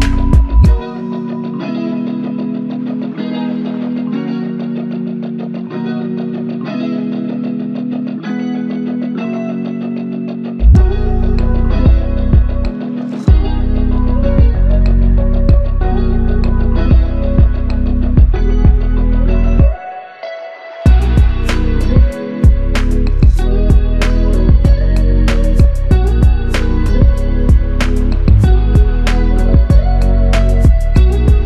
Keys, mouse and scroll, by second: 1.6 alt+click, 5.4 double click, 6.5 shift+click, 7.6 shift+click, 13.8 shift+click, 15.4 shift+click, 15.7 shift+double click, 16.1 shift+click, 17.5 alt+click, 19.6 alt+shift+click, 23.4 f, 25.5 double click, 29.2 alt+click.